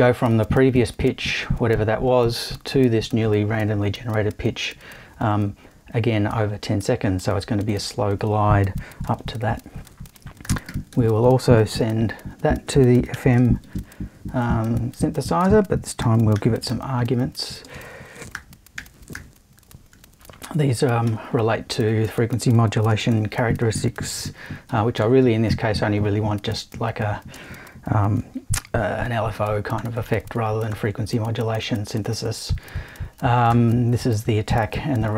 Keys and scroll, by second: 9.2 super+i, 10.2-13.6 typing, 15.4-19.6 typing, 21.1 l, 22.9 space, 24.7 |, 25.0 0, 27.3 space, 29.4 |, 29.8 0, 33.5 0.